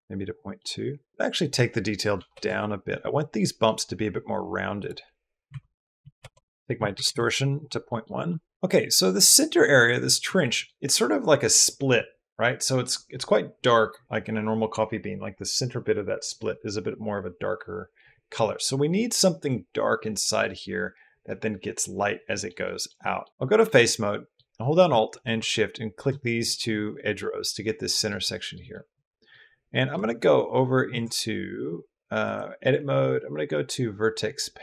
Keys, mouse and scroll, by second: 0.4 click, 1.3 click, 3.2 click, 4.6-6.0 drag, 6.6 click, 7.7 drag, 8.1 click, 8.6 drag, 9.8 middle drag, 10.3 middle drag, 18.2 middle drag, 20.0 middle drag, 22.1 middle drag, 22.4 middle click, 22.8 middle click, 23.2 middle click, 23.3 3, 23.6 middle click, 24.4 middle click, 26.0 middle click, 27.0 middle click, 28.0 click, 28.2 middle click, 28.5 middle click, 29.5 middle click, 29.7-30.6 Tab, 30.8 Tab, 31.3 Tab, 32.0 Tab, 32.2-34.6 middle drag.